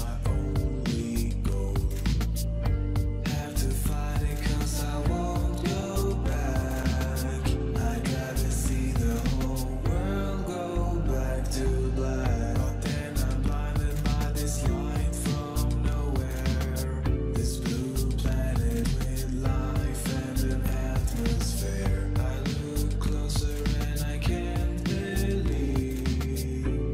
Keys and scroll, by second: 2.5 5, 3.3 Return, 5.4-7.8 typing, 8.3 Return, 12.0-12.8 typing, 13.6 Return, 18.9-19.5 typing, 20.2 ctrl+a, 21.2-21.9 typing, 26.3 v.